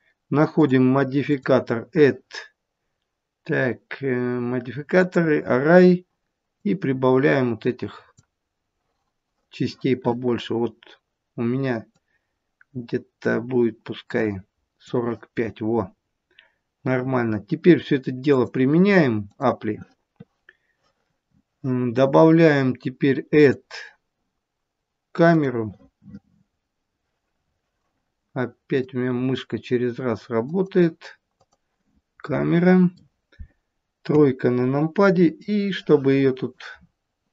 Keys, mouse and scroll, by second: 0.5 click, 1.3 click, 6.6 click, 11.8 click, 16.1-16.6 scroll down 2, 18.3 click, 23.5 click, 28.7 click, 32.2 middle click, 34.0 KP_3, 35.3 click, 36.8 scroll down 6.